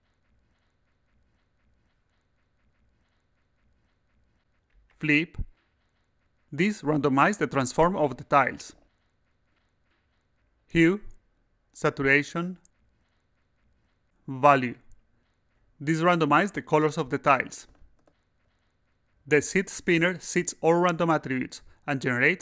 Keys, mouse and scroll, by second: 2.2-4.5 drag, 5.1 click, 5.5 click, 6.0 click, 9.3 click, 12.6 click, 14.3 click, 19.4 click, 20.1 click, 20.6 click, 21.4 click, 22.3 click.